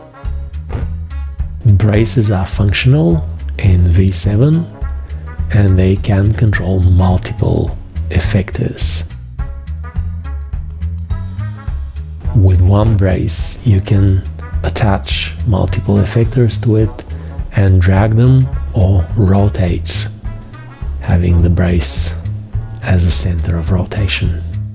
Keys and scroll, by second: 2.3 v, 4.8 g.